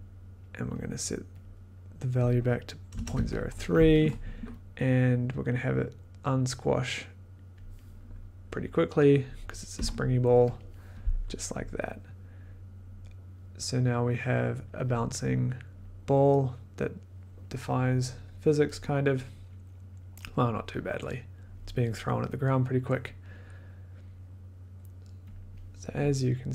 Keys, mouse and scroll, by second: 1.4 click, 1.7 click, 2.0 click, 2.9-3.3 typing, 3.9 click, 7.5 click, 7.9 click, 9.7 3, 10.5 click, 14.6 click, 15.8 click, 25.6-26.5 drag.